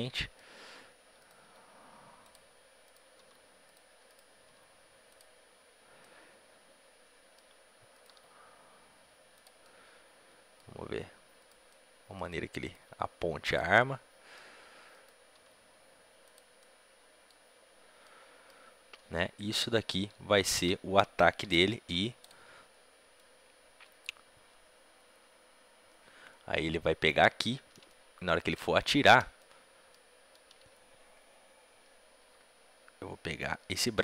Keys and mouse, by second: 0.0-1.2 drag, 1.2-5.9 right drag, 1.3 r, 2.7-4.0 drag, 3.1 r, 4.4 r, 5.9-7.8 drag, 7.8-9.5 right drag, 8.0 r, 9.5-11.3 drag, 11.3-14.2 right drag, 12.7 r, 13.6-14.8 drag, 15.3 r, 16.4 right click, 16.5-18.1 drag, 18.3 middle click, 20.2 a, 20.4 a, 22.1 i, 23.1-24.7 drag, 24.8 click, 27.4 click, 27.8 middle click, 28.0 middle click, 28.2 middle click, 28.4-29.4 drag, 33.2-34.0 right drag.